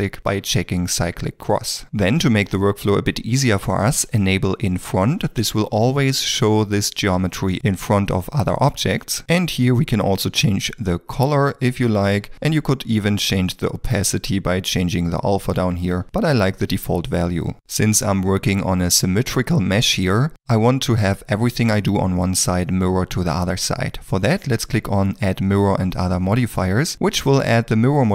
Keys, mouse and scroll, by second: 2.7 ctrl+middle click, 15.7 0, 16.0 ., 16.0 Return, 16.0 3, 18.4 ctrl+middle click, 19.1 middle click.